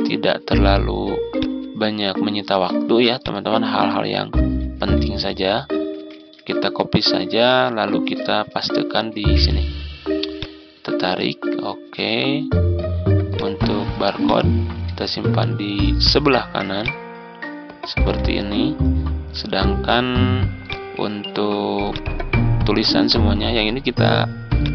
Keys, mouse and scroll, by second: 0.4 z, 1.2 click, 4.4 ctrl+scroll down 1, 7.2 Tab, 10.2-16.5 drag, 16.7 ctrl+click, 20.5 click, 24.5-24.7 drag.